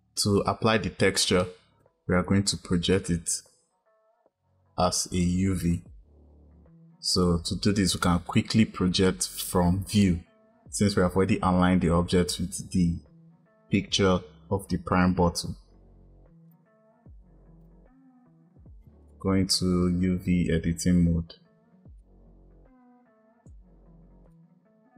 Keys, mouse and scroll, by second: 2.8 click, 8.1 click, 16.4 click, 17.5-19.4 drag, 22.0-24.9 drag.